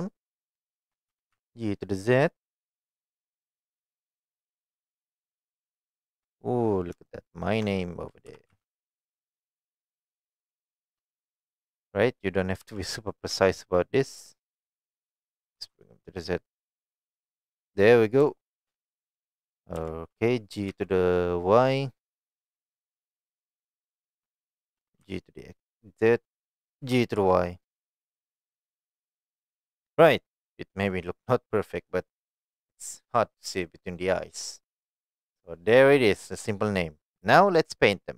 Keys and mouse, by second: 0.6 shift+middle drag, 1.1 g, 1.3 z, 5.1 click, 5.7-6.1 shift+middle drag, 7.1-7.5 shift+middle drag, 8.3 g, 8.5 z, 10.0 click, 10.4 shift+middle click, 12.6 g, 15.6 z, 17.7 click, 18.3-18.6 shift+middle drag, 19.8 g, 20.7 y, 24.5 click, 24.7 g, 25.0 z, 26.4 click, 26.8 g, 27.2 y, 29.5 click, 30.3 middle click, 32.6 middle click, 33.6-34.2 middle drag, 34.6-34.9 middle drag, 35.4-36.7 middle drag.